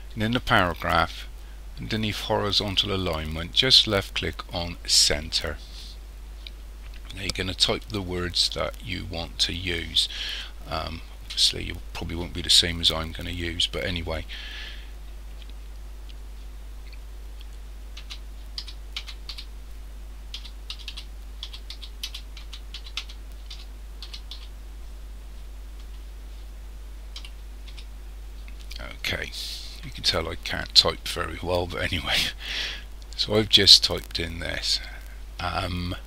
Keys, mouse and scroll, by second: 4.9 click, 18.6 c, 19.3 h, 20.3-24.3 typing, 27.2 o, 27.7 s.